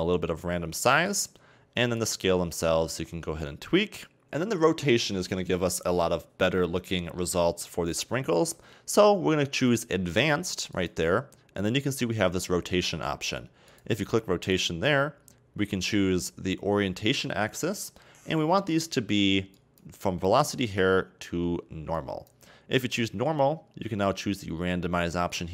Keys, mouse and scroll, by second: 2.0-4.2 drag, 10.8 click, 13.7 click, 14.4 click, 19.6-22.6 drag, 24.1-25.5 drag.